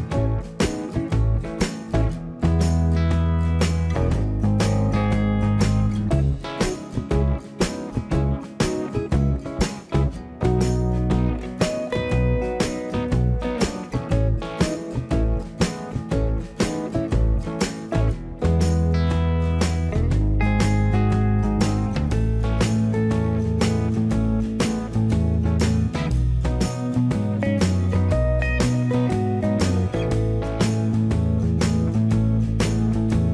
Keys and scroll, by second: 3.5 ctrl+c, 5.4 ctrl+v, 14.1 shift+space, 14.2 Escape, 21.6 Delete, 32.5 m.